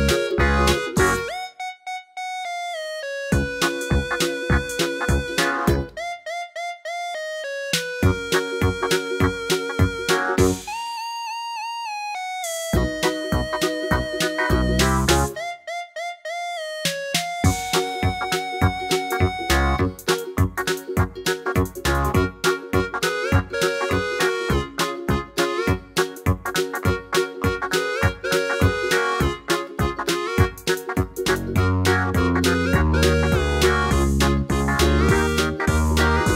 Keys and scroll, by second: 4.9 Left, 5.0 Left, 6.7 Right, 7.0 Left, 7.7 super+c, 8.7 super+v, 9.3 Right, 9.4 Right, 9.6 Right, 13.6 Up, 13.7 Up, 13.8 Page_Up, 13.9 Page_Up, 14.1 Page_Up, 18.1-20.2 typing, 27.9-28.8 typing, 32.6 Down, 32.6-33.4 typing.